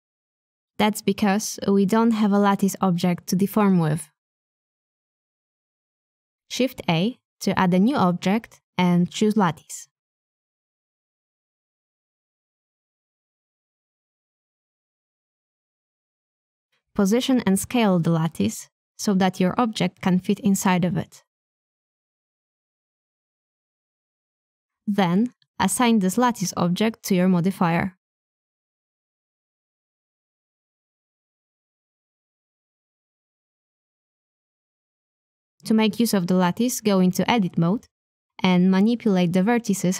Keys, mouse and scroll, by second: 3.0 middle click, 8.5 middle click, 9.2 s, 11.3 KP_1, 12.5-15.3 drag, 15.3 KP_3, 16.2 s, 18.7 click, 19.8-21.0 middle drag, 23.3 click, 23.9 click, 28.7 click, 30.5-32.3 drag, 33.5 click, 34.5 Tab, 36.0 middle click, 36.6 a, 36.7 a, 37.2 middle click, 38.0 b, 39.7 middle click.